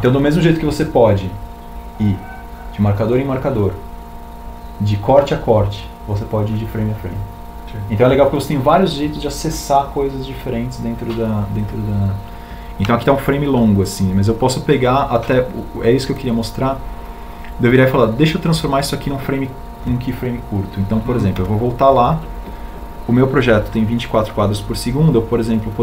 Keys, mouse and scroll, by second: 1.3 Down.